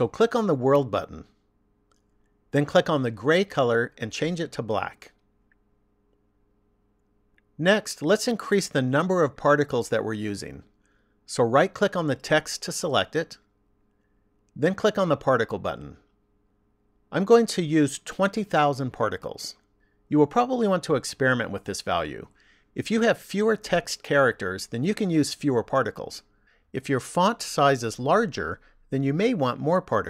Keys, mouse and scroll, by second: 1.3 click, 4.0 click, 11.5 right click, 14.5 click, 16.8 click, 19.6 KP_0.